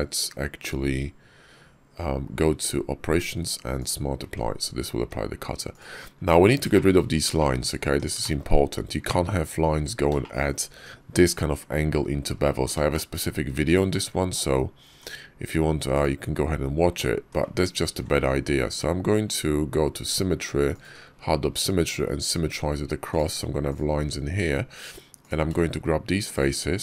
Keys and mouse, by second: 4.1 Tab, 4.8 Tab, 5.5 click, 6.0 Tab, 6.6 shift+click, 7.7 Tab, 8.0 shift+click, 10.0 shift+click, 12.8 shift+click, 14.7 Tab, 15.8 click, 17.0 Tab, 17.9 alt+x, 20.5 click, 21.3 Tab, 22.9 click, 23.5 click, 24.2 Tab, 25.1 click, 26.7 shift+click.